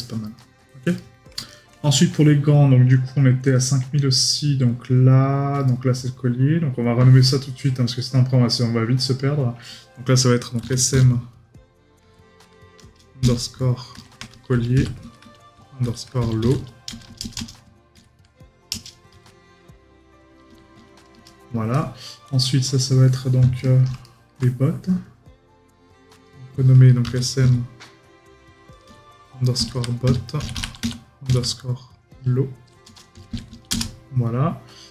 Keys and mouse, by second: 0.4 right click, 23.6 right click.